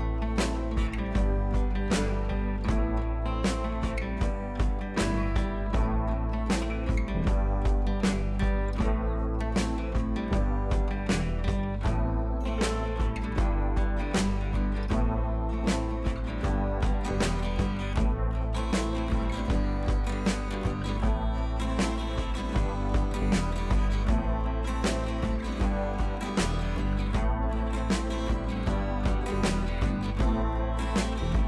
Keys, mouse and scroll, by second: 0.8 click, 2.4-4.2 drag, 5.3 alt+scroll down 1, 5.6-6.2 drag, 7.7 shift+click, 8.5 click, 9.7 click, 12.8 shift+click, 13.1 right click, 13.7 click, 14.4-15.0 scroll up 2, 15.4 alt+scroll up 1, 15.6-16.4 drag, 19.8-20.2 shift+drag, 21.3-21.6 shift+drag, 30.0-31.0 drag.